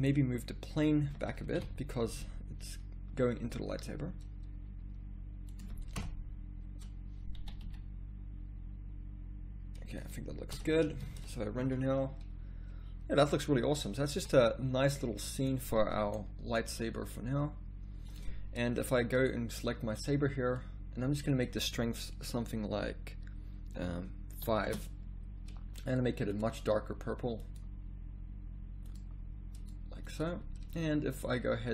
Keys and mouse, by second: 1.6 KP_7, 3.3 g, 5.9 KP_0, 7.4 g, 10.5 a, 11.4 shift+z, 14.2 z, 14.3 z, 16.6 g, 25.9-29.2 drag, 31.6-31.7 drag.